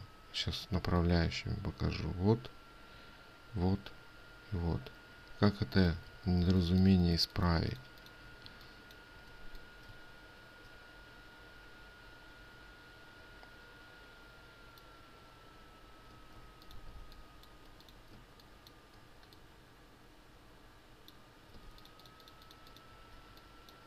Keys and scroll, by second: 6.6 ctrl+z, 18.6 ctrl+space, 22.1 ctrl+space.